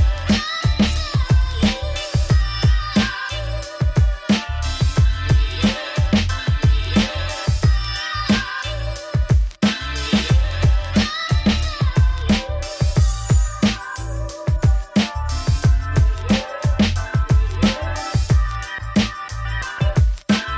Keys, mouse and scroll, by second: 0.3 ctrl+z, 0.5 ctrl+z, 1.3 click, 3.0 click, 3.1 click, 3.5 scroll up 2, 3.8 middle click, 4.2-6.1 scroll down 1, 6.6-7.7 drag, 7.7 middle click, 8.7 Tab, 9.0 3, 9.1 click, 9.3 g, 10.6 Tab, 10.8 Tab, 10.9 a, 11.2 KP_7, 11.7 z, 13.7 Tab, 13.8 click, 14.1 Tab, 14.6 scroll down 1, 14.8 1, 14.9 shift+middle click, 15.4 click, 15.8 scroll up 1, 15.9 g, 17.2 Tab, 17.4 click, 18.0 Tab, 18.5 g, 20.0 middle click, 20.1 scroll down 5, 20.2 Tab, 20.4 z.